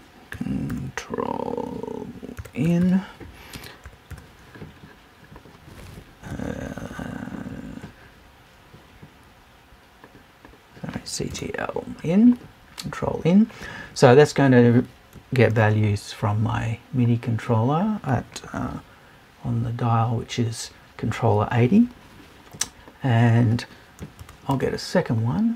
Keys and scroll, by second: 11.3 BackSpace.